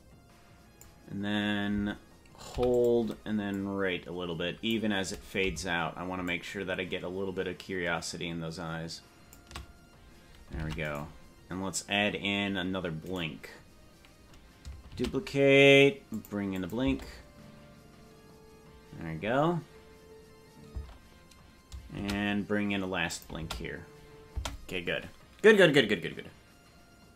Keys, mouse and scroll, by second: 2.6 i, 3.5-4.8 drag, 6.2-9.3 shift+drag, 10.6 ctrl+Tab, 11.0 right click, 13.2 right click, 15.0 shift+d, 16.6-18.7 drag, 16.8 space, 21.0 space, 22.0 shift+d, 23.4 space, 24.4 space.